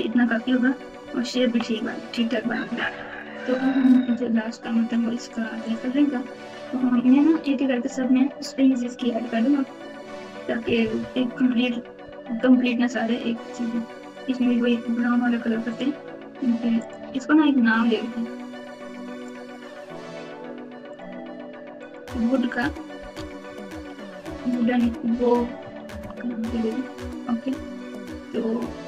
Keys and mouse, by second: 0.0-1.5 typing, 2.7 KP_4, 2.9 KP_4, 3.0 KP_4, 3.1 KP_4, 4.3 z, 5.6 click, 10.6-11.4 typing, 15.6-16.9 drag, 18.6-20.9 drag, 21.8-25.9 drag, 23.1 o.